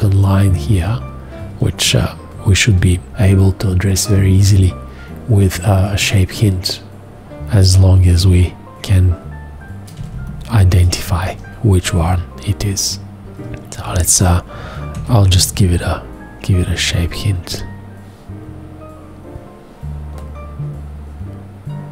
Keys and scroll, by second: 3.1 F2, 10.0 ctrl+space, 15.1 ctrl+shift+h.